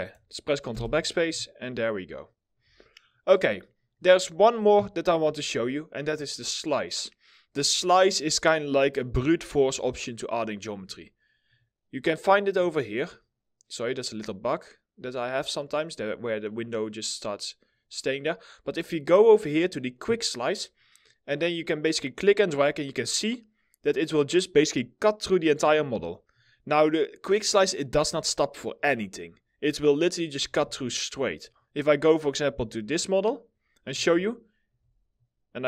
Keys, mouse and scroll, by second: 0.4 ctrl+BackSpace, 1.9 middle click, 2.5 alt+middle click, 3.3 middle click, 9.6 alt+right click, 12.5 middle click, 15.3 middle click, 20.4-20.7 scroll down 1, 20.7 middle click, 27.9 alt+middle click, 30.2 alt+w, 30.2 middle click, 30.3 scroll down 1, 30.6 middle click.